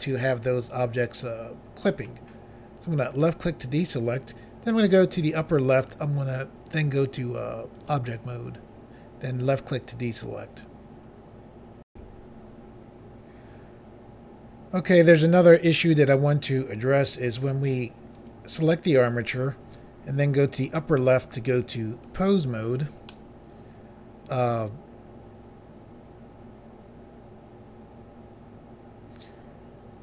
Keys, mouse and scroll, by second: 3.1 click, 3.2 click, 5.3 click, 5.5 click, 7.8 click, 7.9 click, 9.4 click, 11.9 Pause, 18.1 click, 18.3 click, 20.6 click, 20.8 click, 22.0 click, 22.2 click, 23.1 middle click.